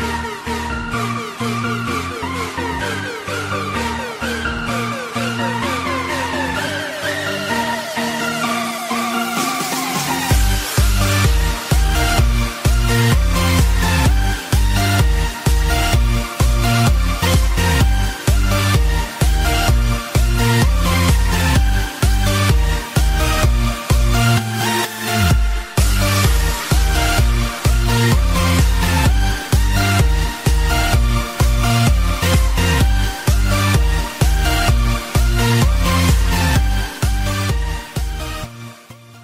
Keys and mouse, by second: 0.5 click, 0.5 KP_0, 0.5 KP_5, 0.7 Return, 3.1 click, 4.1 click, 5.0 right click, 6.6 right click, 6.8 click, 8.5 click, 9.8 click, 10.5 click, 11.7 click, 12.9 space.